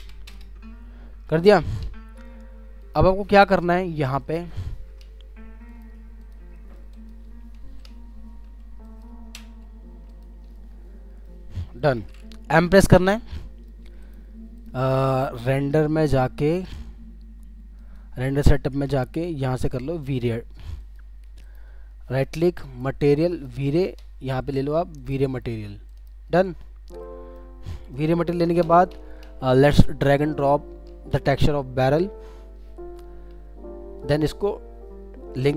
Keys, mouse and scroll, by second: 0.3 Return, 0.3 2, 6.5 middle click, 7.2 scroll down 1, 9.3 g, 10.5 alt+middle click, 11.5 alt+scroll up 2, 11.8 alt+middle click, 12.5 m, 13.4 middle click, 14.0 right click, 21.4 right click, 26.6-27.0 scroll down 1, 27.0 middle click, 28.6 super+d.